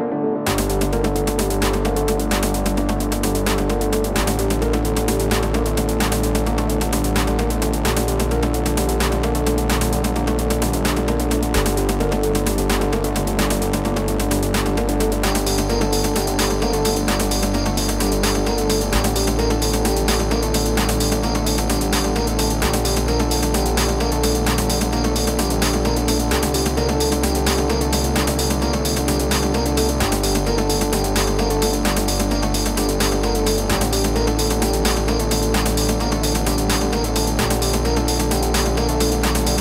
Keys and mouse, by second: 0.1 click, 3.7 click, 5.3 click, 5.8 click, 7.0 click, 8.3 b, 9.4 click, 10.5 z, 10.7 ctrl+=, 11.0 space, 11.1 click, 11.5 space, 12.2 click, 14.7 z, 15.9 ctrl+z, 16.7 ctrl+z, 18.3 space, 18.4 click, 18.8 space, 20.4 ctrl+z, 23.5 space, 23.5 click, 23.6 space, 26.5 z, 27.2 z, 28.6 space, 28.7 click, 29.5 space, 29.6 click, 29.7 space, 30.0 click, 32.6-33.4 typing, 32.7 click, 35.9 z, 36.4 space, 36.5 click, 36.5 space, 39.4-39.6 typing, 39.5 click.